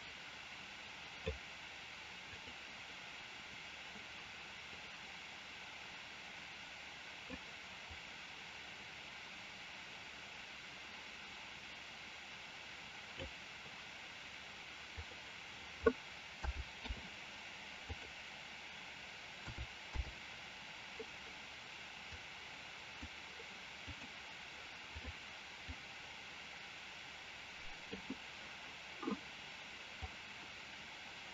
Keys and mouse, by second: 2.3 click, 4.8-7.4 drag, 7.8-13.1 drag, 15.0-16.9 drag, 18.0-20.1 drag, 22.0 click, 23.7-25.0 drag, 25.7-27.9 drag, 30.2-31.3 drag.